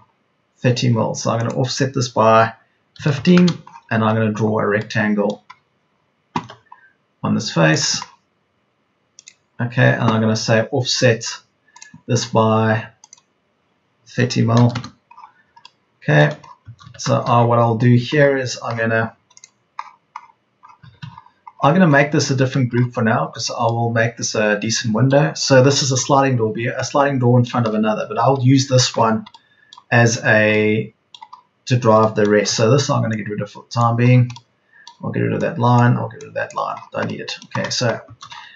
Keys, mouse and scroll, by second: 2.9 KP_1, 3.1 KP_5, 6.3 r, 14.4 KP_3, 14.6 KP_0, 16.7 Escape, 33.0 e, 38.2 Escape.